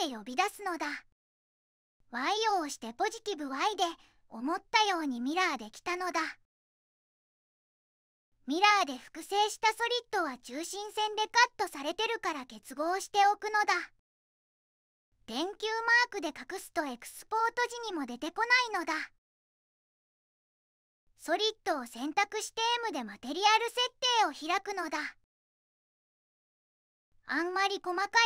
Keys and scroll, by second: 2.4 y, 12.5 q, 13.4 q, 22.7 m.